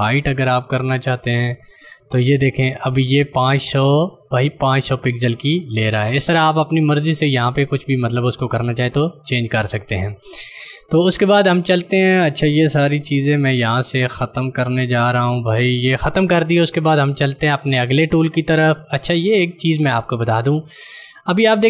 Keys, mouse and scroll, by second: 1.9 click, 13.3 z, 14.8 d, 19.2 ctrl+click.